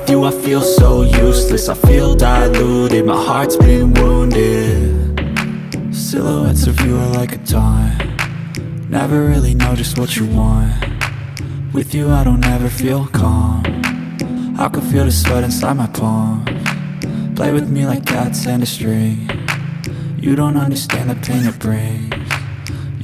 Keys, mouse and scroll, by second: 2.4 scroll down 1, 6.1 click, 8.5 F9, 9.1 click, 10.1 F4, 11.4 click, 12.5 ctrl+o, 12.8-13.5 scroll down 1, 14.7 scroll down 1, 15.7 click, 16.5 click, 17.8 click, 18.4 F4, 19.6 F9, 21.6 ctrl+o, 22.3 scroll down 1.